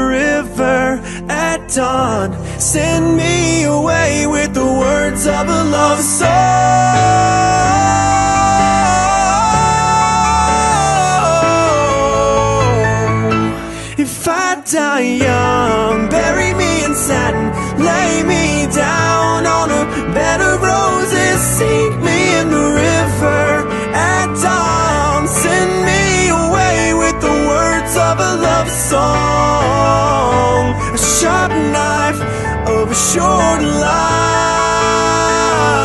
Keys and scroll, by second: 30.3 ctrl+z, 33.7 ctrl+z, 34.3 ctrl+z.